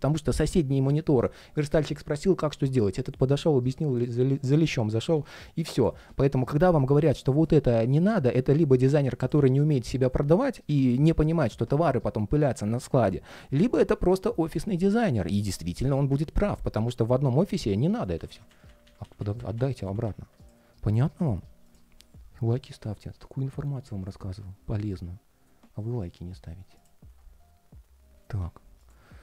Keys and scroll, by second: 4.9 super+z, 17.9 super+z.